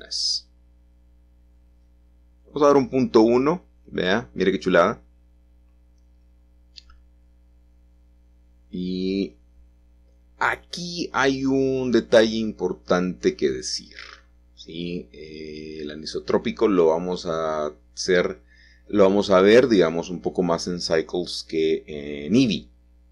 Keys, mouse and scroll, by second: 0.6 middle click, 1.3 click, 2.6 typing, 2.9 Return, 4.2-8.4 middle drag, 8.9-11.2 drag, 11.4 click, 12.8 click, 13.2 click, 14.6-15.4 scroll down 2, 15.4-16.2 scroll up 1, 16.2-17.4 scroll down 1, 17.4 scroll up 1, 17.6 scroll down 1, 17.8 middle click, 17.8-18.6 scroll up 2, 19.3 alt+h.